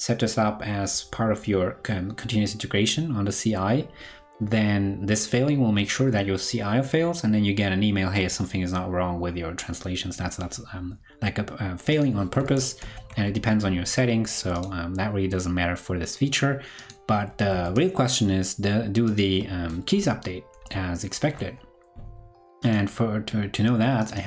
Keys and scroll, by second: 12.7 ctrl+super+Left, 17.6 super+Tab, 20.6 ctrl+Left, 21.2 ctrl+Left.